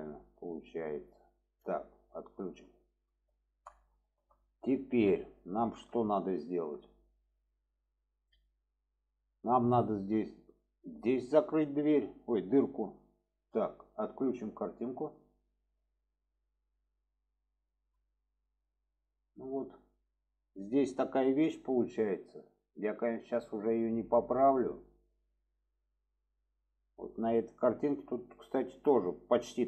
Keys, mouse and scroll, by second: 2.4 click, 3.0 middle click, 3.9-4.3 shift+middle drag, 4.8 shift+middle drag, 5.6 shift+middle click, 6.4-6.7 shift+middle drag, 9.0 shift+middle drag, 11.7 shift+middle drag, 12.6 shift+middle click, 14.9 click, 15.3-16.8 middle drag, 17.3-17.8 middle drag, 18.0 shift+middle click, 18.8 middle click, 19.4 shift+middle drag.